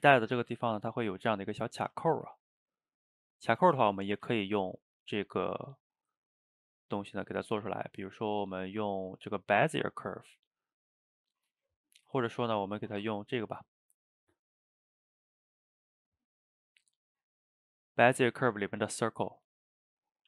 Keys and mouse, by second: 1.9 a, 2.0 a, 2.9 click, 3.3 shift+right click, 3.8 shift+middle click, 4.2 shift+a, 11.4-12.1 middle drag, 12.1 ctrl+z, 13.0 shift+a, 19.7 middle click.